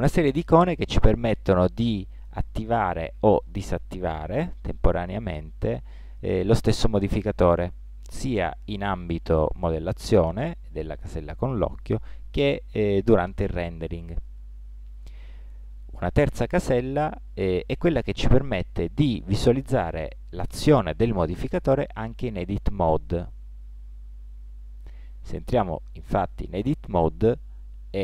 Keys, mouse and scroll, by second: 2.4-5.7 drag, 11.4-16.0 drag, 22.1-25.0 drag, 24.4 Tab, 25.3-26.9 middle drag.